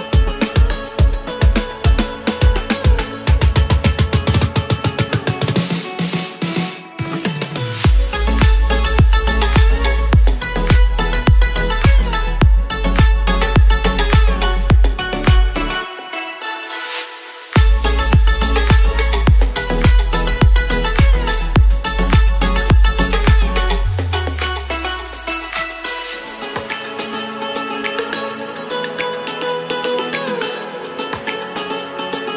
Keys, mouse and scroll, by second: 5.2 right click, 6.0 right click, 6.7 right click, 13.7 ctrl+z, 13.8 ctrl+z, 14.0 ctrl+z, 14.6 ctrl+z, 15.2 ctrl+z, 15.7 ctrl+z, 16.2-16.5 ctrl+z, 17.0 ctrl+z, 17.6 ctrl+z.